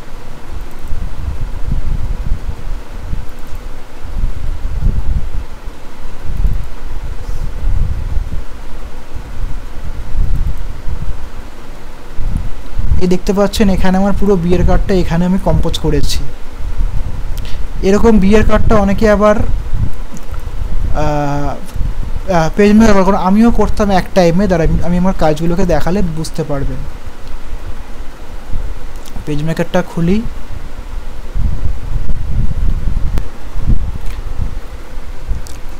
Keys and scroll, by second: 34.1 ctrl+o.